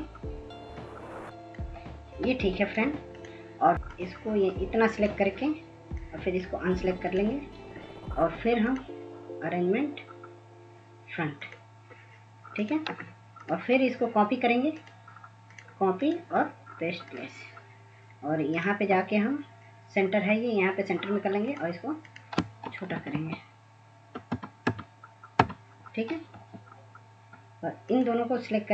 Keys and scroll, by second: 22.7 Down, 23.0 Down, 23.2 Down, 23.4 Down, 23.5-24.1 Down, 24.3 Down, 24.7 Down, 25.4 Down.